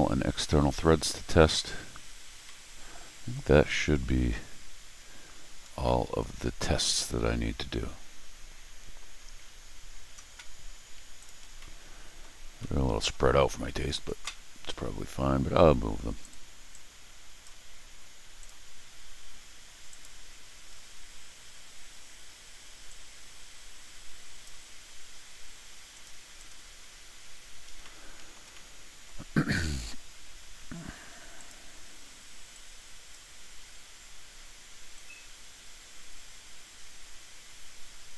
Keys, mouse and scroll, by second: 2.3 scroll down 1, 2.4 middle click, 4.8-5.2 scroll up 1, 5.7 scroll down 1, 5.8 middle click, 6.9 scroll up 1, 7.0 scroll, 11.2 click, 11.6 middle click, 12.6 middle click, 16.2 click, 16.7 click, 18.4 click, 19.9 click, 20.6 scroll down 2, 22.8-24.4 drag, 25.9 click, 26.3 click, 27.8 middle click, 27.9 middle click, 28.5 middle click, 31.3 click, 32.5 click, 34.9-38.1 drag.